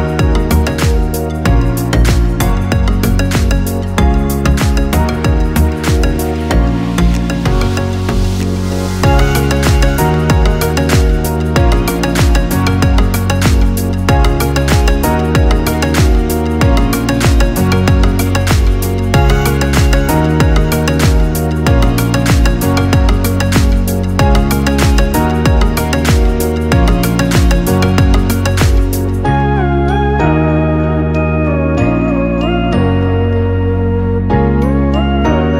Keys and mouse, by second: 2.2 Tab, 3.2 click, 3.9 Tab, 4.9-5.8 ctrl+middle drag, 5.8 click, 6.7 x, 9.0-17.5 middle drag, 17.5 ctrl+r, 21.9 ctrl+r, 25.5 ctrl+r, 28.5-30.2 middle drag, 30.2 ctrl+r, 34.7 ctrl+r.